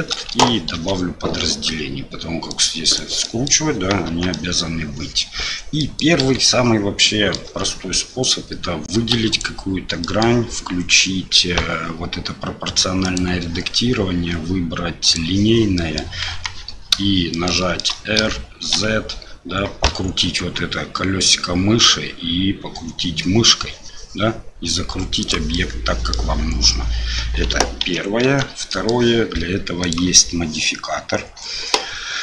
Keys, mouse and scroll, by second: 0.0 shift+middle click, 0.7 ctrl+r, 3.2 middle click, 4.1 Tab, 4.3 middle drag, 5.8 middle click, 6.2 KP_1, 7.0-7.4 middle drag, 7.5 Tab, 8.2 click, 9.1 3, 9.3 click, 10.0 middle click, 13.1-15.3 drag, 15.7 middle click, 16.3 KP_1, 17.3 shift+middle click, 17.5 shift+middle click, 18.2 r, 25.5 middle click, 27.8 ctrl+z, 28.2 Tab, 28.7 middle drag, 29.8-32.2 drag.